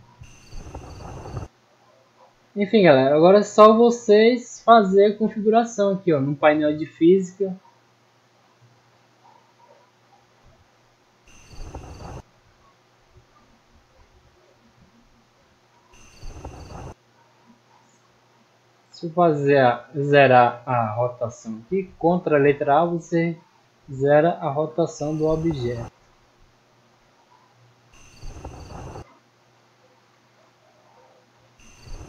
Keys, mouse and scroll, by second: 2.1 middle click, 2.7 middle click, 3.7 click, 4.6 click, 7.3 right click, 10.1 click, 13.8 click, 23.0 click, 23.7-24.1 middle drag, 24.2-24.7 scroll up 1, 26.7-27.4 drag, 29.4 right click, 30.3 click.